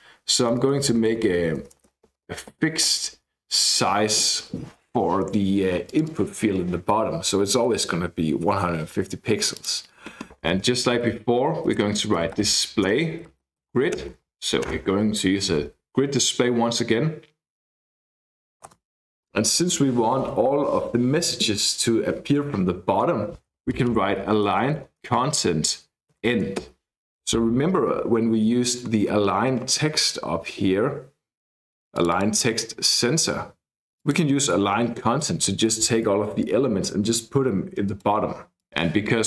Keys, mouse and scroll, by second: 0.5 Left, 0.7 Left, 0.9 Left, 1.1 Left, 1.3 Left, 1.7 space, 2.1 Left, 2.2 Left, 2.5 space, 2.9 Right, 3.2 Right, 5.9 click, 9.5 click, 10.4 Return, 10.6-14.4 typing, 14.6 Return, 23.9-27.1 typing, 28.1-29.7 scroll up 2, 31.9 click, 34.0 click, 35.6-37.1 scroll down 2, 37.8 click.